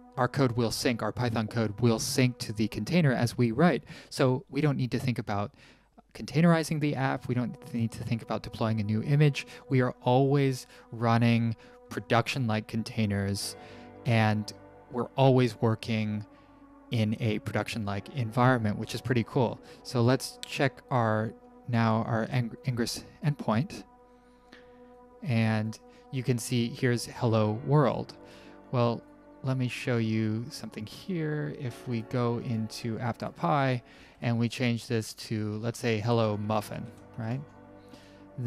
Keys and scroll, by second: 34.2-37.8 typing, 37.9 alt+Escape.